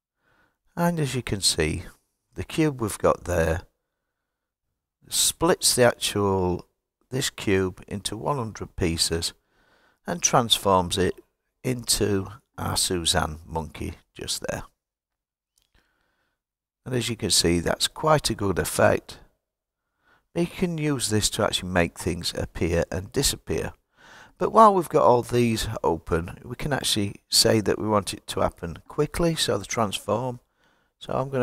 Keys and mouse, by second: 26.6-31.4 drag.